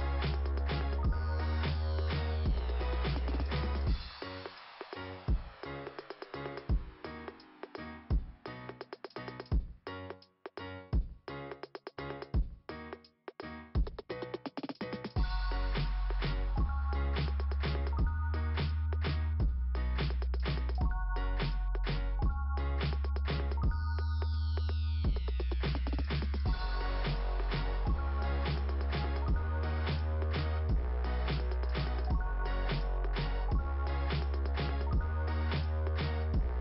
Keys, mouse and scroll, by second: 0.9 click, 2.1 click, 2.5 click, 2.8 click, 8.9 click, 8.9 click, 9.8 click, 10.3 click, 10.8 click, 13.1 click, 14.0 click, 14.1 click, 15.8 click, 16.5 click, 20.3 click, 21.9 scroll up 2, 25.3 right click, 27.8 click, 28.3 click, 29.4 right click, 30.5 right click, 31.5 click, 34.7 click.